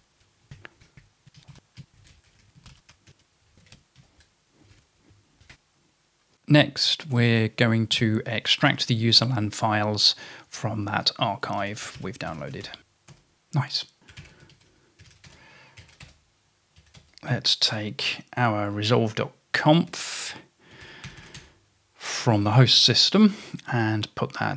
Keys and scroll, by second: 0.0-9.7 typing, 1.5 ctrl+e, 11.4-17.0 typing, 13.2 Return, 19.9-21.7 typing.